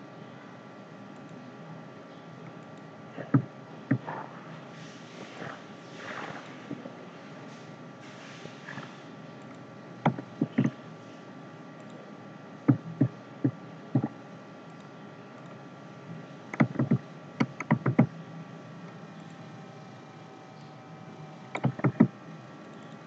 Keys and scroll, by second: 10.4 ctrl+z, 16.8 ctrl+z, 21.9 ctrl+z.